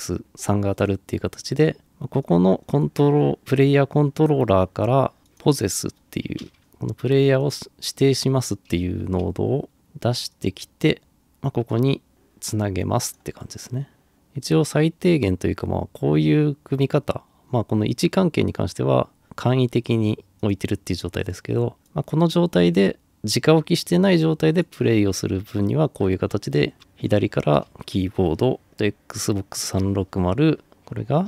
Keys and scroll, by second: 6.4-7.1 typing, 25.9-27.7 typing.